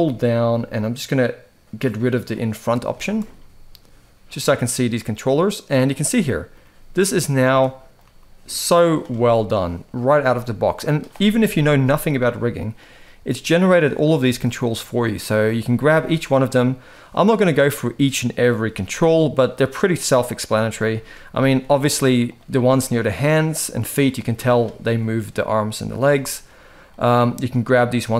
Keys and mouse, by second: 2.7 shift+middle drag, 3.1-4.6 middle drag, 5.8-6.1 middle drag, 6.3 g, 7.2-7.6 middle drag, 7.7 g, 8.8-9.1 middle drag, 9.7 click, 9.9 g, 11.1 KP_1, 11.9 r, 12.7 g, 14.2 shift+middle drag, 15.0 click, 15.6 r, 18.5 g, 19.8 r, 20.6 shift+middle drag, 21.1 g, 22.4 shift+middle drag, 23.5 g, 25.8-26.1 middle drag, 26.6-26.9 middle drag, 27.8 g.